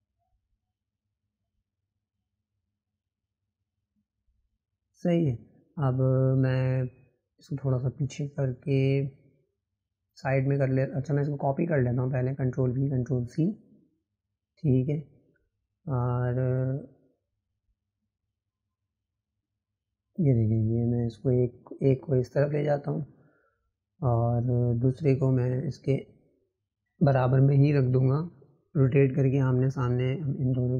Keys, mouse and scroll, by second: 1.3 click, 2.3 scroll down 2, 3.5 click, 12.1 click, 13.2 shift+click, 15.0 ctrl+v, 16.6 click, 20.0 click, 21.2 click, 25.7 click, 27.3-28.9 drag.